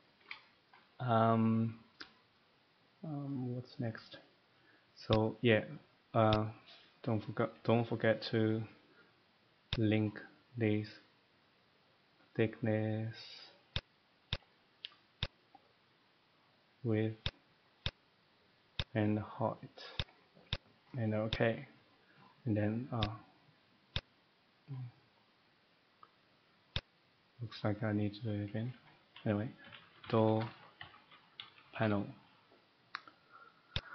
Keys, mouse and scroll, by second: 0.7 shift+middle click, 2.6 middle click, 5.0 click, 6.5 click, 9.8 click, 13.8 click, 14.3 click, 15.2 click, 17.2 click, 17.8 click, 18.8 click, 19.9 click, 20.5 click, 21.3 click, 21.9 middle click, 23.0 click, 24.0 click, 27.5 click, 29.6-31.8 typing.